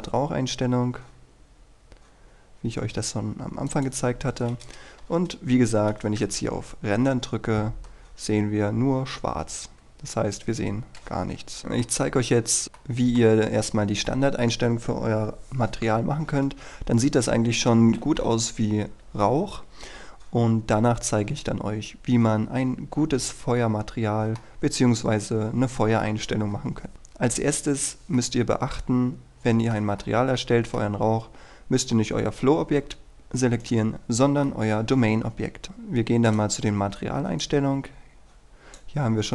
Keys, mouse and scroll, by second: 4.2-4.6 scroll down 1, 4.6-5.0 scroll up 1, 5.0 KP_0, 6.2 F12, 8.1-10.2 scroll down 1, 10.2 Escape, 10.7 scroll down 1, 10.8-11.6 scroll up 1, 11.6 middle click, 13.5-17.7 scroll down 1, 17.7 KP_1, 19.6-20.9 scroll up 1, 20.9-24.9 middle drag, 26.9-27.4 scroll up 1, 28.3-31.4 middle drag, 33.7 right click, 34.5 middle click, 35.6-36.4 scroll up 1, 36.4-38.9 drag.